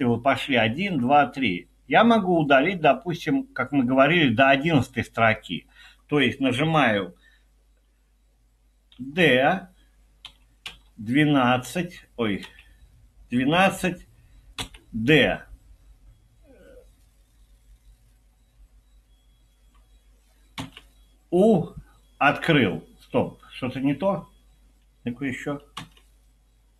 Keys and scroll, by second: 9.0 typing, 10.0-11.4 typing, 12.4 typing, 14.6 typing, 20.7 typing, 25.8 typing.